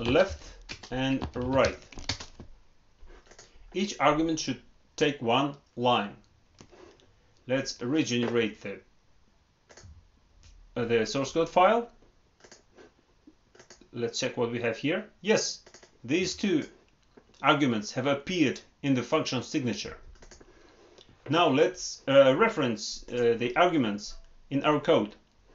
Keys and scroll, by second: 2.0 ctrl+Return.